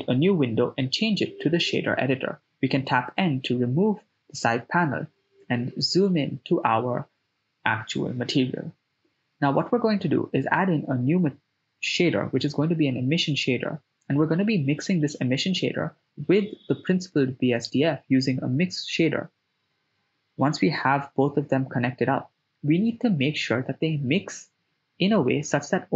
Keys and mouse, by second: 0.1-1.8 drag, 3.0 n, 4.1 ctrl+middle click, 4.9 middle click, 8.7 ctrl+middle click, 9.3 middle click, 9.7 shift+a, 12.7 s, 14.5 middle click, 15.2-15.9 drag, 16.4-16.8 drag, 17.2 shift+a, 22.0-23.0 drag, 24.4-25.6 drag.